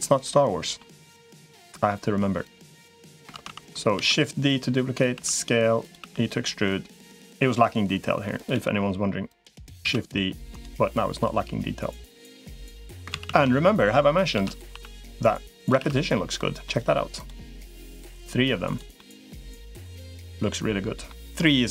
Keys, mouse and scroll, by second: 0.2 middle click, 1.3 middle click, 2.4 click, 3.2 ctrl+z, 3.8 shift+d, 4.2 click, 5.0 s, 5.8 e, 8.4 l, 9.2 click, 9.6 shift+d, 10.8-12.8 drag, 13.0 ctrl+z, 13.2 ctrl+z, 14.2 shift+d, 15.6 shift+r, 16.5 middle click, 17.0 click, 17.6-18.6 drag, 18.8 middle click, 19.9 middle click.